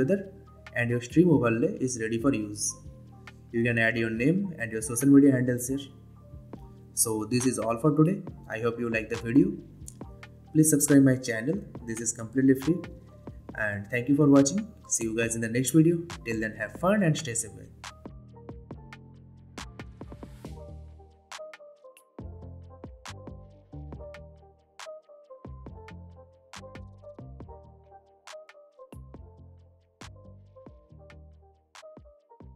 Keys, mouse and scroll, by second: 0.7 click, 3.4 space, 9.9 space, 10.4 click, 12.6 ctrl+F9.